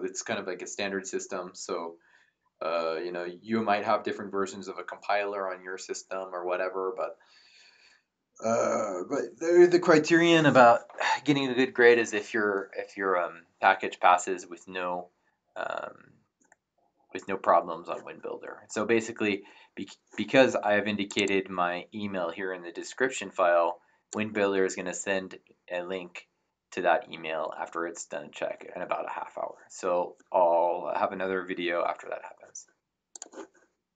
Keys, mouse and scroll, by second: 21.1 click, 33.1 click.